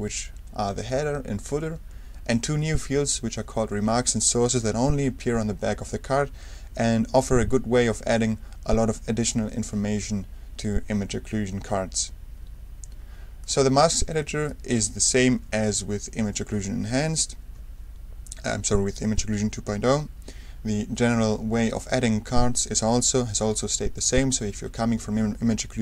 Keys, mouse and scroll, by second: 13.4 click, 17.1-17.6 ctrl+scroll down 2, 21.7-22.2 scroll up 2.